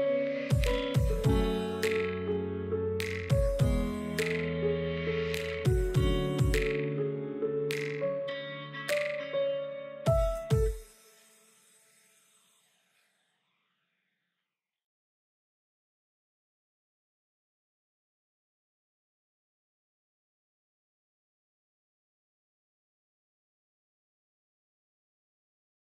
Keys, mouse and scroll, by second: 1.2 g, 2.6-3.9 middle drag, 3.9 alt+z, 4.1 click, 4.3-5.9 middle drag, 6.0 l, 6.5 l, 6.9 s, 9.3-9.7 middle drag, 9.7-10.2 scroll down 3, 10.2 s, 11.3-11.9 middle drag, 11.9-12.8 scroll up 2, 12.8 KP_1, 13.4 KP_3, 14.0 alt+z, 14.3 click, 14.9 click, 15.6 c, 17.7 middle click, 17.9 alt+z, 18.3-18.6 scroll up 1, 18.6 g, 19.7 scroll down 2, 19.8-20.6 middle drag, 20.6 scroll up 2, 20.9-21.9 shift+middle drag, 21.9 3, 22.0 click, 22.2 middle click, 22.3 scroll up 2, 22.6-22.9 middle drag, 22.9 shift+click, 23.4 shift+drag, 23.6 middle click, 24.4 g, 25.3 scroll down 3, 25.5-25.9 middle drag.